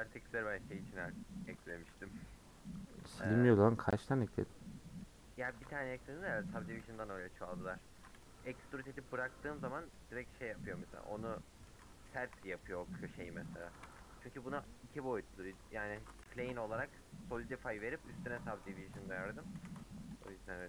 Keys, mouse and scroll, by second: 0.3-1.5 middle drag, 1.5 click, 2.0 x, 2.7 click, 3.2 x, 3.9-5.5 middle drag, 5.5 click, 5.9 x, 8.0 click, 8.4 g, 9.6-10.9 middle drag, 10.9-11.4 scroll down 6, 11.4 middle click, 11.7-12.2 scroll up 5, 12.2 2, 12.6 alt+click, 12.9-13.4 scroll down 6, 13.7 a, 14.7 u, 15.7 middle click, 16.0 Tab, 16.3 h, 16.5-17.3 scroll down 10, 17.3 click, 18.2 KP_Decimal, 18.6-19.1 middle drag, 19.1 Tab, 19.2 middle click, 20.2 alt+Left.